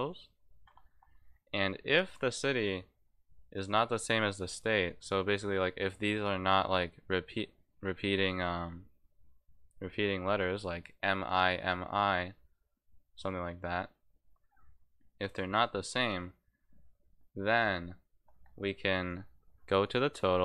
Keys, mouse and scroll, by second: 1.4 click, 19.0 click, 19.6 click, 20.2 click.